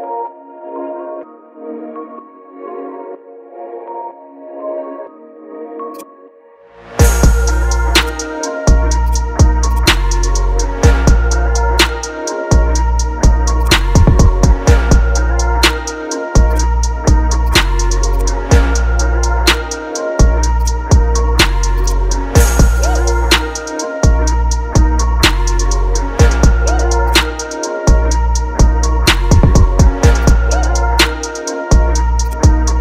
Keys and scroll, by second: 0.6 shift+s, 2.3 shift+d, 4.1 shift+s, 4.8 Return, 5.2 ctrl+t, 7.3 Return, 9.9 space, 10.9 BackSpace, 11.4 BackSpace, 13.2 ctrl+space, 14.1 ctrl+KP_Subtract, 17.0 Delete, 18.4 BackSpace, 19.0 shift+s, 19.6 Return, 19.8 ctrl+t, 29.3 Return, 30.5 BackSpace, 31.1 ctrl+c, 31.3 Return, 31.6 ctrl+t, 32.7 ctrl+t.